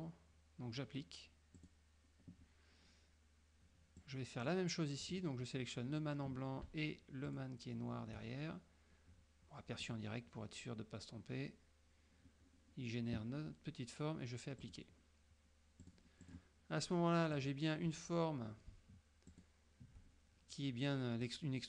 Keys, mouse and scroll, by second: 1.7 click, 4.1 click, 5.2 click, 7.3 shift+click, 9.9 click, 14.7 click, 15.9 click, 16.3 click, 17.4 click, 19.4 shift+click.